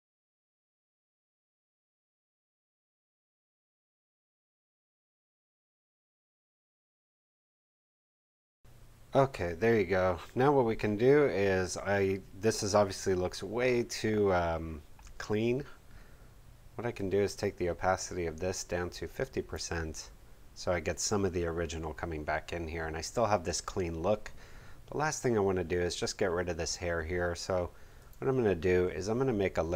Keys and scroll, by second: 1.2 ctrl+super+f, 8.0 ctrl+super+f.